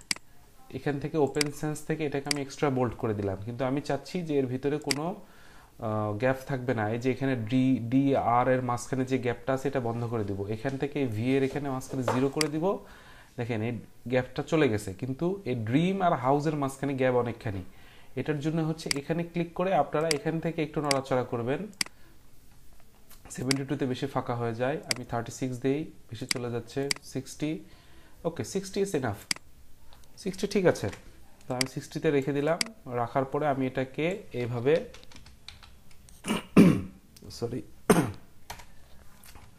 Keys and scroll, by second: 30.7 ctrl+t, 34.6 Right, 34.8-35.4 typing, 38.4 Return.